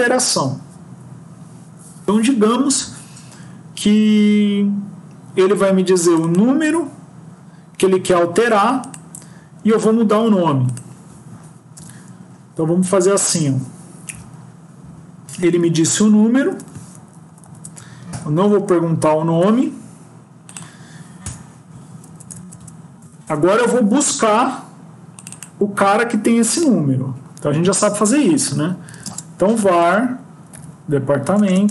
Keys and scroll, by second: 11.7 BackSpace, 15.6 Down, 16.3 Home, 16.4 Home, 17.2 shift+Down, 18.0 ctrl+;, 22.0 BackSpace.